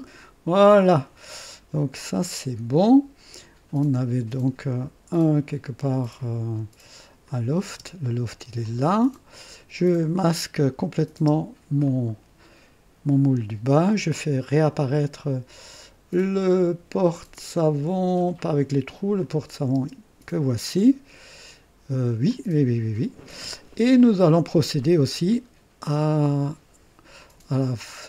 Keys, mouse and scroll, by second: 0.7 click, 1.7 scroll down 1, 2.4 scroll down 1, 7.2 click, 7.7 space, 8.6 click, 10.7 click, 11.2 space, 11.8-14.5 drag, 15.2-15.8 scroll up 4, 17.8 scroll up 2, 19.2 click, 19.7 space, 20.6-22.1 drag, 22.3-23.4 drag, 24.0-25.4 drag, 27.1-28.0 drag.